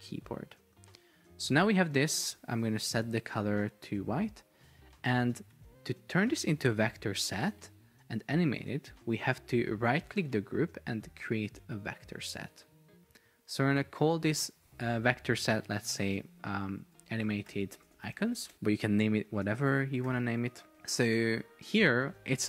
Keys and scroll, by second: 5.6 Escape, 16.6-18.5 typing, 20.8 Return.